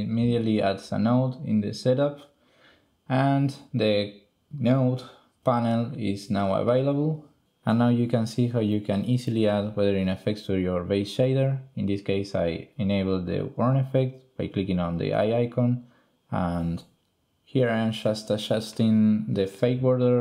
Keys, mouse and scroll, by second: 1.3 click, 3.5-6.9 drag, 7.5 drag, 8.3 click, 9.8 click, 14.5 click, 15.0 click, 15.4 click, 18.3 click, 18.7 click, 19.1 shift+drag, 19.4 click, 20.0 click.